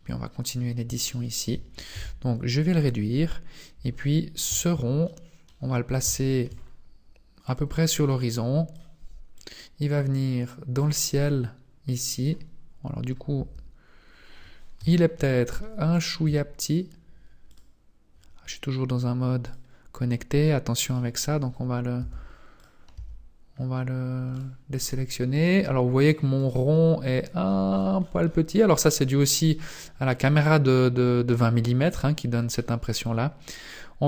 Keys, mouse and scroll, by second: 0.6 scroll up 1, 1.0 shift+middle click, 1.9 s, 3.3-3.7 scroll down 1, 3.7 Tab, 5.0 middle click, 5.5 scroll down 5, 6.1 shift+middle click, 6.5 scroll down 2, 7.4 click, 9.3 click, 11.2-12.5 scroll up 3, 13.3 Tab, 13.3-14.6 scroll up 1, 14.8 KP_Decimal, 15.6 middle click, 16.2 s, 19.4 click, 22.9 Tab, 23.5-24.3 scroll up 1, 24.3 right click, 24.3 scroll up 1, 25.4 right click, 26.0 right click, 26.8 right click, 27.4-29.3 scroll down 30, 29.4 middle click, 29.7 scroll down 2, 30.2 middle click, 32.6 middle click, 33.4 right click.